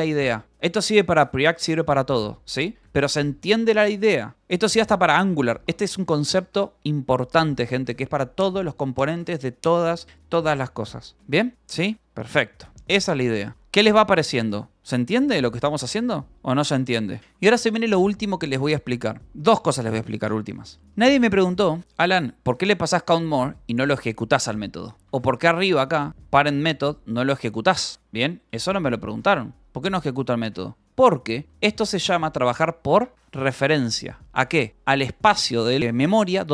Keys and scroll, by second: 2.5 u, 3.3 ctrl+r, 4.2 ctrl+s, 4.5 ctrl+j, 8.0 ctrl+j, 11.5 u, 12.6 k, 13.3 ctrl+k, 14.8 j, 16.0 k, 17.0 k, 17.7 ctrl+s, 19.2 j, 20.5-24.1 typing, 22.7 Escape, 24.2 Escape, 25.5-28.9 typing, 29.2 Escape, 30.7-32.3 typing, 30.8 Escape, 33.7 Escape, 34.7 k, 35.0 h.